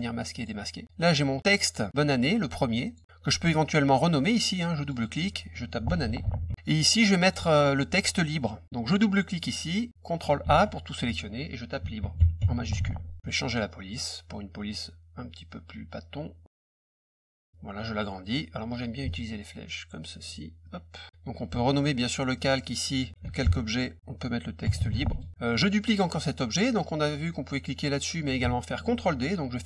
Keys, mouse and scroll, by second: 0.3 click, 0.9 click, 2.8 click, 3.6 click, 4.8 click, 4.9 click, 5.8-6.7 typing, 7.2 click, 9.3 click, 9.4 click, 10.4 ctrl+a, 11.7-13.2 typing, 13.9 click, 17.3 click, 19.0-20.2 ctrl+drag, 20.6 click, 22.3 click, 22.5 click, 22.9-25.3 typing, 25.5 middle click.